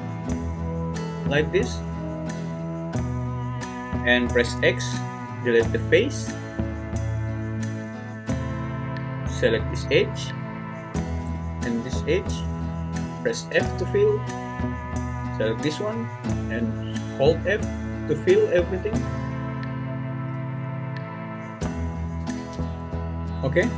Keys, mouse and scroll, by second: 4.5 x, 13.5 f, 16.4 f, 16.9-20.3 f, 20.6 f, 21.1-21.4 f, 22.4 ctrl+z, 23.6 `.